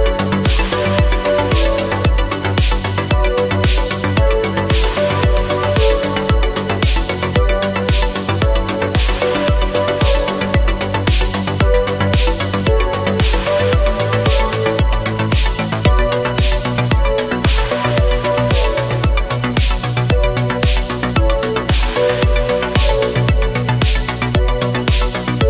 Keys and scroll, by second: 1.7 space, 3.9 ctrl+z, 4.7 ctrl+z, 5.1 ctrl+z, 6.5 ctrl+z, 6.8 space, 7.1 ctrl+z, 7.4 ctrl+z, 9.7 ctrl+z, 10.4 ctrl+z, 12.3 ctrl+z, 16.7 ctrl+z, 17.0 ctrl+z, 17.9 ctrl+z, 18.6 space, 21.1 ctrl+z, 21.9 ctrl+z, 22.1 ctrl+z, 22.8 ctrl+z, 23.0 ctrl+z, 23.2 ctrl+z, 23.4 space, 24.1 ctrl+z, 24.5 ctrl+z.